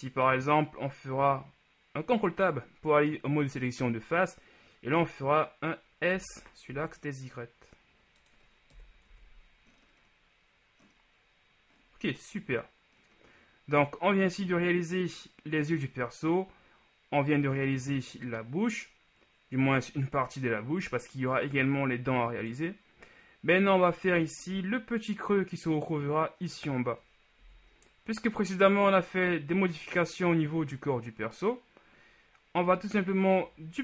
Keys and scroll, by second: 6.3 s, 8.8 KP_1, 9.2 Tab, 27.6 KP_1.